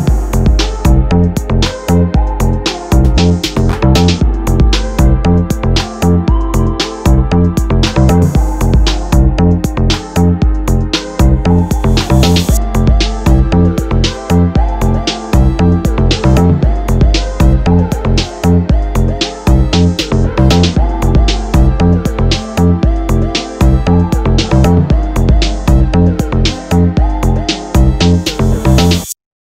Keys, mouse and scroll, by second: 0.8 Tab, 1.2 click, 1.6-2.3 middle drag, 2.3 shift+click, 2.7 ctrl+j, 2.9-3.2 scroll down 2, 3.2-5.9 middle drag, 5.9-8.5 drag, 6.5 KP_Enter, 8.6 click, 8.7-17.5 middle drag, 11.5 scroll up 2, 16.0 scroll down 2, 17.5 click, 17.6 Tab, 17.9 click, 19.4 shift+d, 19.5 Return, 20.6 click, 20.9 Tab, 21.2 click, 22.1 KP_3, 22.3 z, 22.7 shift+middle click, 23.1 2, 23.1 click, 23.6 g, 24.8 scroll down 1, 25.0 click, 25.4 g, 26.8 ctrl+shift+click, 27.0 scroll up 1, 27.3 shift+middle click, 28.0 click, 28.4 g.